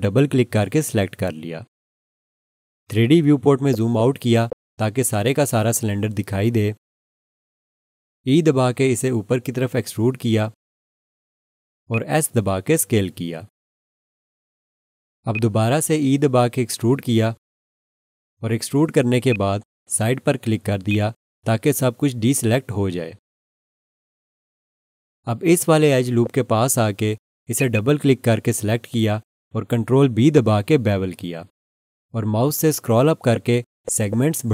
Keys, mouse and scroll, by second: 3.5 scroll down 1, 8.6 e, 11.9 click, 12.9 s, 15.3 click, 16.6 e, 19.3 click, 26.1 scroll up 1, 27.6 click, 27.7 double click, 30.7 ctrl+b, 33.1 scroll up 1.